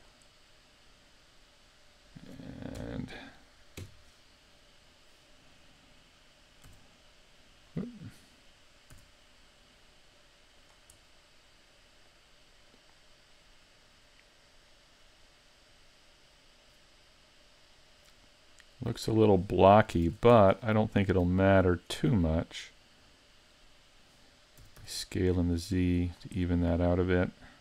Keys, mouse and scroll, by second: 0.0 click, 1.5 middle click, 2.8 KP_1, 3.8 KP_5, 4.7 scroll up 1, 6.7 r, 7.8 right click, 8.9 g, 10.7 click, 11.0 middle click, 14.5 middle click, 20.1 ctrl+Tab, 21.8 alt+right click, 22.2 middle click, 24.6 s, 26.4 middle click.